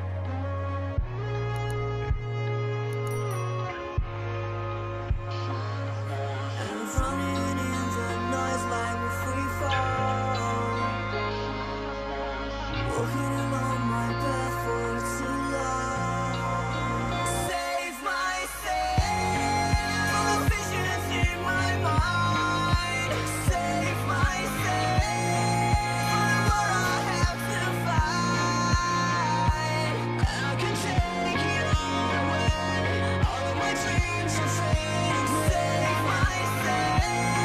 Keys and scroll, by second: 23.8 ctrl+j.